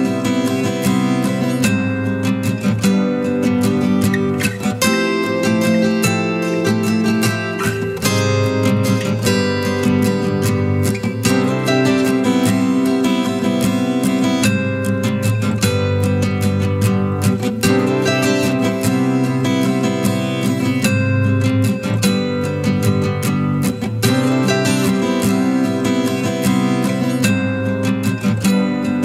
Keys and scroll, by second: 23.6 ctrl+space, 24.1-25.9 ctrl+space.